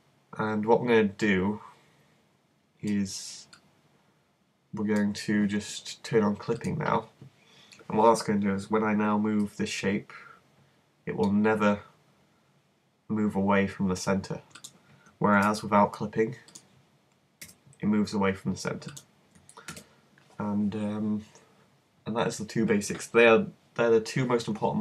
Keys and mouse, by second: 3.6-6.6 middle drag, 6.6-8.4 drag, 9.5 g, 14.7 click, 15.4 super+z, 17.4 g, 19.0 click, 19.8 z.